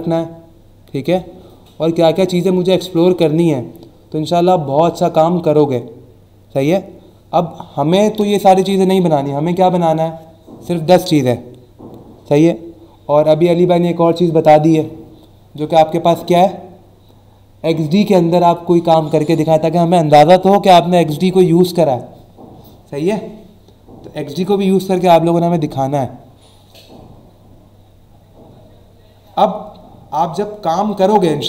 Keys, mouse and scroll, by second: 9.4 click, 30.8 click.